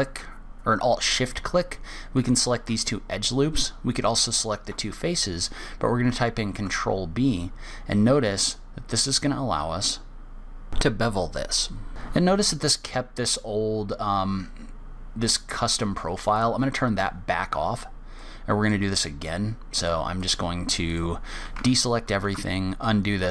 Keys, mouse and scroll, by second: 0.0 alt+click, 1.3 alt+click, 2.5 alt+shift+click, 3.2 middle click, 6.8 ctrl+b, 10.7 middle click, 10.9-12.6 scroll up 1, 16.7 click, 20.5 click, 21.2 click, 22.0 ctrl+z, 22.4 ctrl+z, 23.2 middle click.